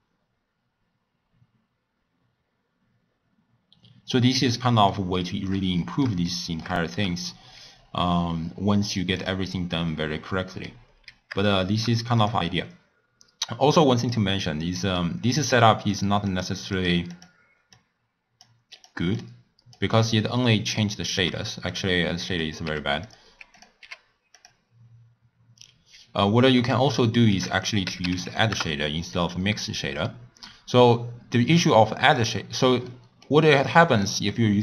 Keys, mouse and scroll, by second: 4.9-9.1 middle drag, 9.1 click, 9.7-10.8 middle drag, 10.8 scroll up 1, 10.9-11.5 scroll down 1, 11.5-12.1 shift+middle drag, 12.1 click, 14.0 click, 15.8 click, 17.1 click, 18.7-22.4 drag, 23.5-34.6 drag.